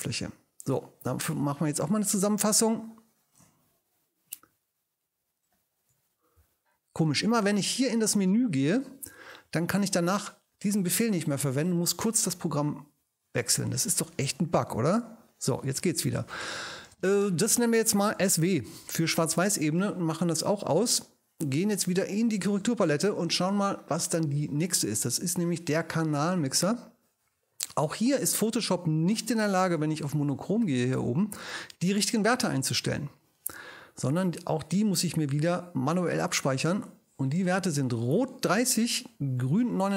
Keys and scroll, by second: 2.3 alt+shift+super+e, 6.4 alt+shift+super+e, 14.7 alt+shift+super+e, 16.3 ctrl+alt+shift+super+i, 18.1 s, 18.4 w, 18.7 Return.